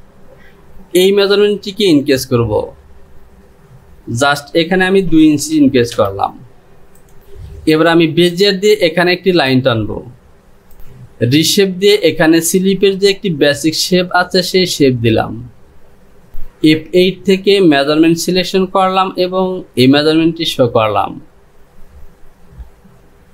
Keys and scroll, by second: 6.0 Return.